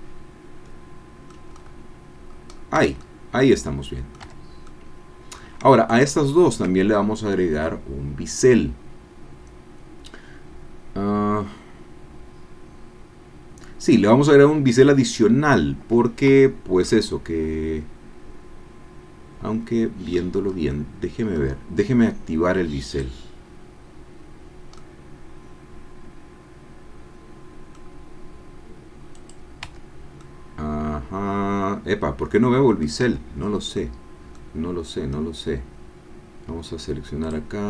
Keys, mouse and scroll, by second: 1.5-1.9 scroll up 2, 2.3-2.8 scroll down 4, 2.9 Tab, 3.0-4.5 drag, 4.5 Tab, 4.7 click, 6.4-7.8 shift+middle drag, 13.8 click, 16.3 Tab, 16.9-20.3 drag, 20.4 scroll up 1, 20.7 click, 22.9 click, 24.8-27.9 middle drag, 29.1 click, 29.9 Tab, 30.2-33.0 drag, 33.2 Tab, 34.0 scroll down 2, 34.3-36.5 drag, 36.5 scroll down 2, 37.3 click.